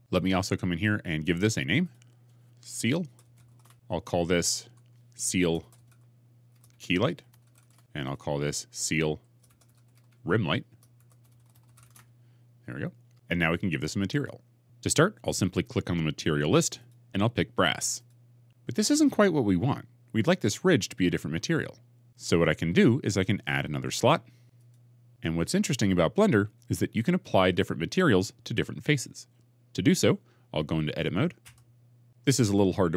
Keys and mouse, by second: 1.7 click, 2.0 F2, 4.5 F2, 7.9 click, 9.0 F2, 16.6-18.0 drag, 24.4 click, 31.3 Tab.